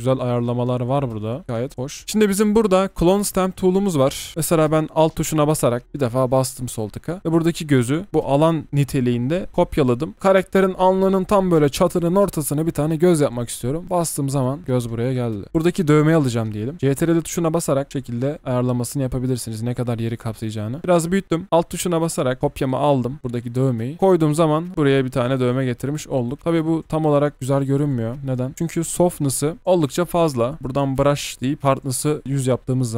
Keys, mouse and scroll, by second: 0.5 scroll up 1, 2.0 double click, 4.3 ctrl+z, 5.8 alt+click, 16.7 ctrl+click, 22.4 alt+click, 26.3 ctrl+click, 27.7 alt+click, 28.8 ctrl+z.